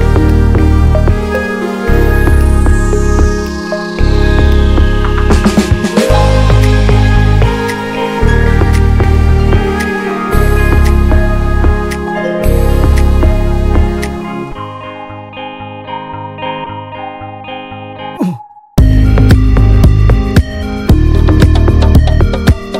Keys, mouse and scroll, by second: 0.1 Tab, 0.5 shift+middle click, 0.9 scroll up 1, 1.1 shift+middle click, 1.6 ctrl+s, 2.2 click, 2.6 click, 5.4 middle click, 5.9 click, 6.6-8.4 drag, 11.5 middle click, 12.4 click, 12.7-15.5 middle drag, 15.5-18.8 drag, 20.3-22.6 drag, 22.6 ctrl+s.